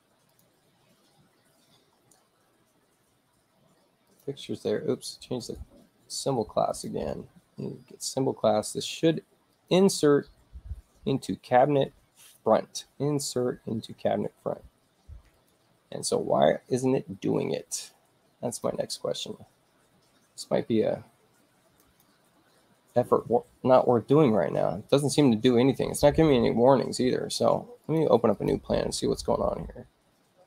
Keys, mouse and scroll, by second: 0.2 click, 4.0 click, 5.4 right click, 6.6 click, 9.4 click, 15.3 click, 18.4 click, 21.7 click, 22.4 space, 27.7 click, 28.2 click.